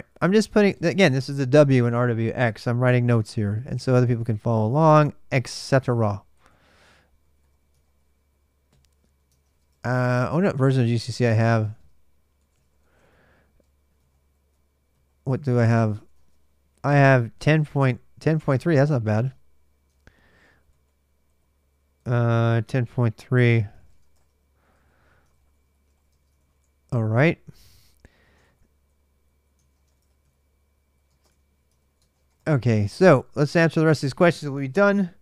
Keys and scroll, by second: 0.0-0.5 typing, 3.1 ctrl+[, 3.1-15.7 typing, 5.4 ctrl+[, 5.6 ctrl+l, 15.9 Return, 18.8 ctrl+a, 19.0 ctrl+a, 20.8-33.8 typing, 28.2 ctrl+[, 28.4 ctrl+j, 31.5 ctrl+[.